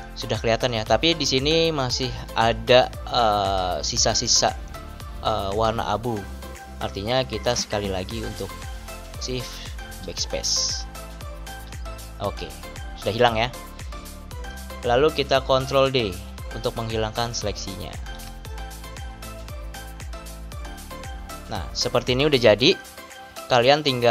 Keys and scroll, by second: 9.7 shift+BackSpace, 11.4 Return, 17.9 ctrl+d.